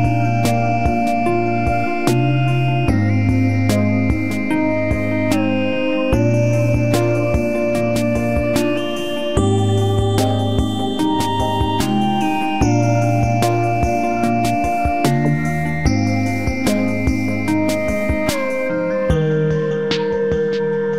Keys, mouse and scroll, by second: 0.7 shift+s, 3.7 shift+click, 10.8 ctrl+click, 11.8 shift+middle click, 13.1 space, 13.2 Escape, 17.8 alt+t, 18.6 shift+middle click.